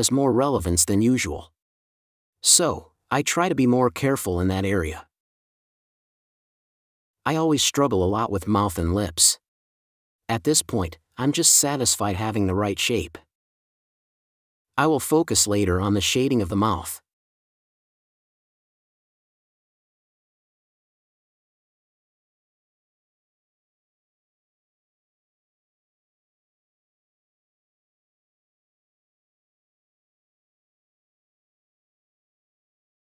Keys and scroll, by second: 4.4 space, 9.6 4, 13.3 5, 14.1 super+z, 14.4 4, 18.9 4, 21.2-22.1 typing, 24.1 super+s, 24.3 space.